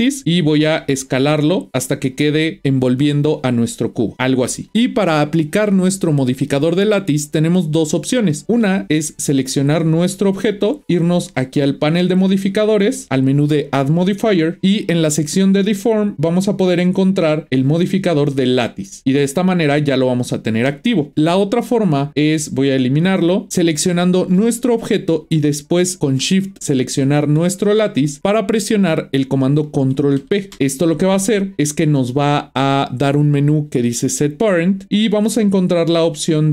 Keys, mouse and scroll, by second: 0.6 s, 9.2 click, 11.7 click, 14.0 click, 22.5-24.5 drag, 26.8 shift+click, 30.2 ctrl+p.